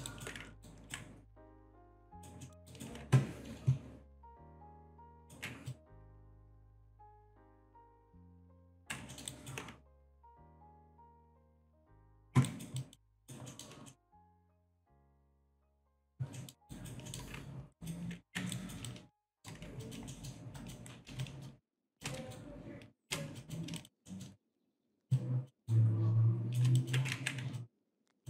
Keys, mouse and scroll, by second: 0.1 alt+right click, 0.7 ctrl+right click, 1.7 click, 2.1 alt+right click, 2.5 alt+middle click, 4.1 click, 5.2 alt+right click, 5.7 ctrl+click, 7.8 click, 8.7 ctrl+right click, 9.1 alt+middle click, 9.3 alt+right click, 9.9 ctrl+click, 10.9 ctrl+click, 12.0 click, 12.5 alt+right click, 13.2 alt+right click, 13.5 alt+middle click, 13.9 alt+middle click, 14.5 alt+shift+click, 14.8 alt+middle click, 15.3 alt+middle click, 15.8 alt+middle click, 16.4 alt+middle click, 16.7 alt+right click, 17.1 alt+middle click, 17.8 alt+right click, 18.6 alt+right click, 19.4 alt+middle click, 19.8 alt+click, 20.1 alt+middle click, 20.6 alt+click, 21.2 shift+click, 22.4 shift+right click, 23.4 alt+click, 23.8 alt+shift+click, 24.1 alt+middle click, 24.6 alt+click, 25.2 shift+click, 25.7 shift+right click, 26.8 alt+click, 27.2 ctrl+z, 27.6 alt+click.